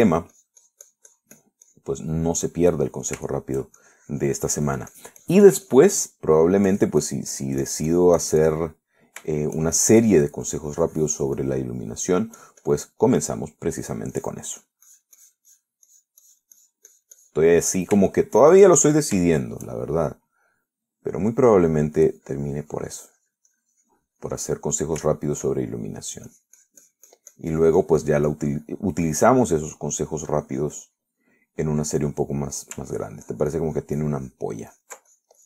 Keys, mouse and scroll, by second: 0.6 middle click, 1.3-3.2 drag, 3.4 middle click, 4.1 middle click, 5.0-7.2 shift+drag, 7.3 middle click, 7.9-10.0 drag, 10.0 middle click, 10.6 shift+middle click, 11.3-13.3 drag, 13.6 click, 15.0-17.0 drag, 18.4 click, 18.8 middle click, 19.4 shift+middle click, 19.9 shift+click, 20.5 shift+middle click, 21.2 shift+middle click, 22.0 click, 23.0 middle click, 23.4-25.6 drag, 25.6-27.2 middle drag, 27.5-32.9 drag, 33.0-34.0 middle drag, 34.2-35.4 ctrl+drag.